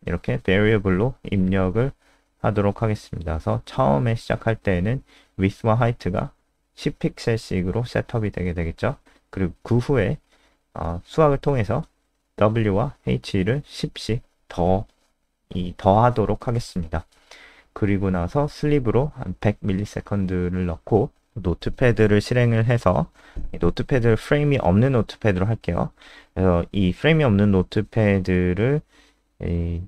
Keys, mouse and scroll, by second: 2.8 click, 3.8-5.0 typing, 5.5 ctrl+s, 6.4 click, 8.0 Return, 10.1-12.2 typing, 13.2 Return, 13.5-18.6 typing, 18.8 click, 20.4 Return, 20.4 typing, 21.2 click, 21.7 alt+click, 22.3 click, 23.5 alt+F4, 23.9 super+n, 24.6 alt+click, 24.9 click, 25.5 click, 25.5 alt+click, 26.0 ctrl+s.